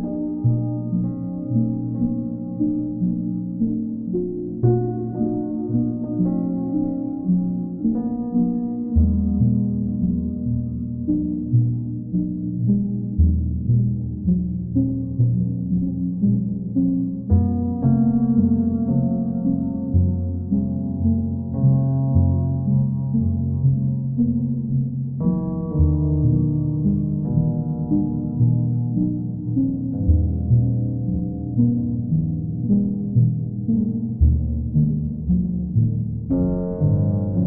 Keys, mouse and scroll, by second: 0.1 click, 0.7 alt+click, 1.5 alt+click, 2.1 alt+click, 2.4 alt+click, 4.7 click, 4.9 ctrl+z, 5.4 ctrl+click, 8.3 click, 10.2 click, 10.7 click, 11.2 shift+click, 11.3 shift+click, 13.1 alt+click, 16.7 click, 17.3 alt+click, 18.0 ctrl+click, 19.8 ctrl+click, 21.9 ctrl+click, 22.8 click, 24.2 click, 24.6 alt+click, 27.0 click, 28.7 click, 29.7 ctrl+click, 30.5 click, 30.9 click, 32.0 click, 32.8 click, 33.5 click, 33.8 click, 34.3 click, 34.6 shift+click, 35.3 alt+click.